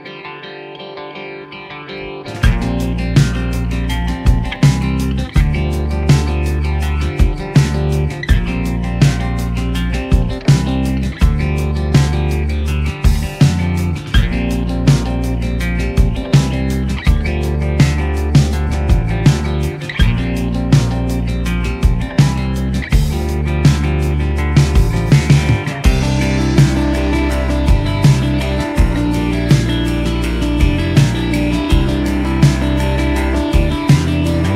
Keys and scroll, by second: 8.8 ctrl+z, 11.4 ctrl+z, 11.7 ctrl+z, 14.1 ctrl+z, 14.3 ctrl+z, 26.9 ctrl+z, 31.6-34.4 typing.